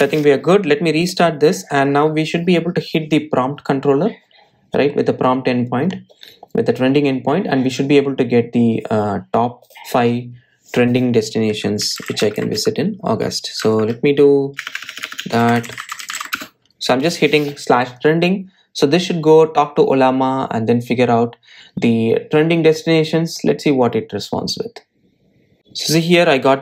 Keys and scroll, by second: 0.4 Tab, 2.4 super+s, 2.5 super+r.